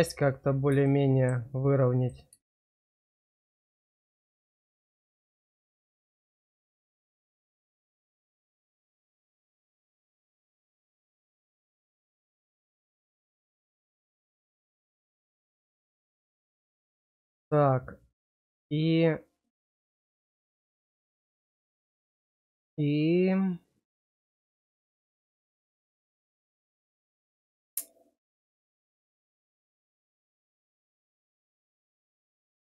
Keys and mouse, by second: 0.8 shift+middle click, 1.9 click, 4.2 shift+click, 5.4 shift+click, 6.0 shift+click, 9.2 click, 10.6-16.5 drag, 17.1-29.2 drag, 30.7 click, 31.6 middle click.